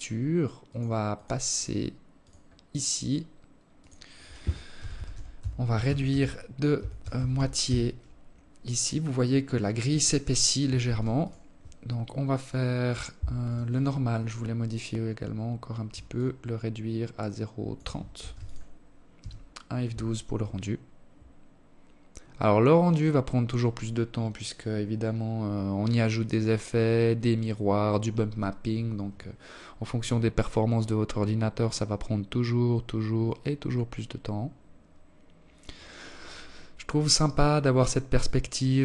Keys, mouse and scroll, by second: 0.5 click, 0.9-1.9 scroll down 1, 2.0 click, 9.1 ctrl+s, 11.7 right click, 12.9-13.6 scroll down 12, 14.3 shift+click, 16.5 ctrl+s.